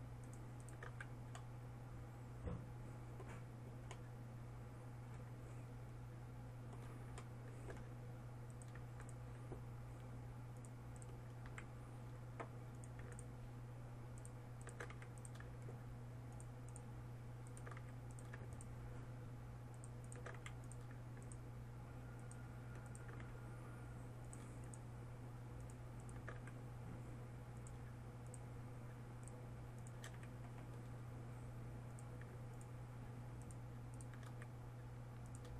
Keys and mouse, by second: 1.5 f, 9.1-12.1 right drag, 12.1 f, 15.5 f, 18.4 f, 21.0 f, 23.8 f, 27.0 f, 30.8 f, 34.9 f.